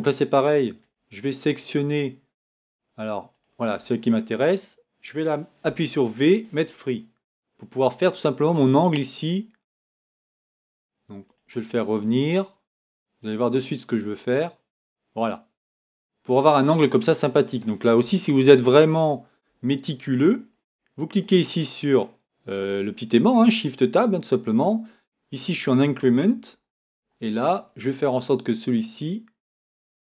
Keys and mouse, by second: 1.8-4.3 right drag, 5.6 v, 11.3 right click, 14.1-17.5 drag, 26.6-30.0 drag.